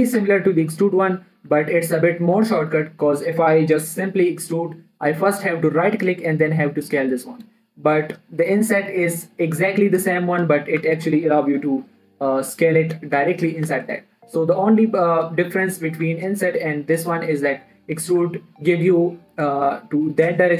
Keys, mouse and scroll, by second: 0.6 click, 1.9 ctrl+z, 3.5 middle click, 4.5 e, 6.4 right click, 6.9 s, 7.8 click, 8.1-11.2 middle drag, 11.0 ctrl+Num_Lock, 11.2 ctrl+z, 12.4-14.4 middle drag, 15.7 click, 16.0 middle click, 16.4 ctrl+z, 18.1 e.